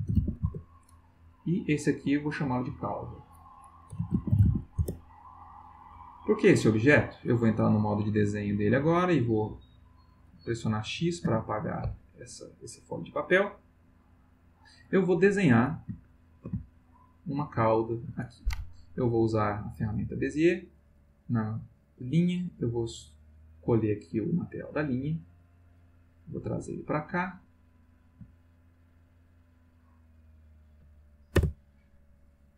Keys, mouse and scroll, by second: 0.0-0.6 typing, 2.2 click, 2.7 click, 3.7-4.9 typing, 7.9 click, 8.9 click, 11.2 x, 12.0 click, 16.1 ctrl+middle click, 16.6 ctrl+shift+middle click, 17.9 ctrl+middle click, 19.6 click, 22.5 click, 25.6-28.1 drag, 28.6 shift+click, 30.1 click, 31.4 Return.